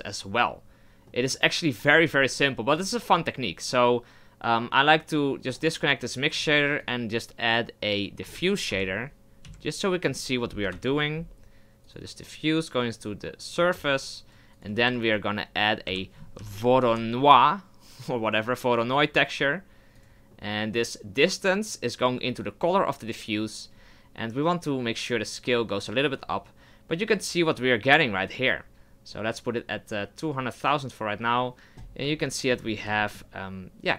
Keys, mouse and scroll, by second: 0.0 click, 1.9 middle click, 2.8 click, 4.7 click, 14.0 click, 23.2 click, 25.2-28.2 drag, 31.8 scroll up 3, 32.1-32.6 shift+middle drag, 32.6-33.9 scroll up 3, 33.0 shift+middle click.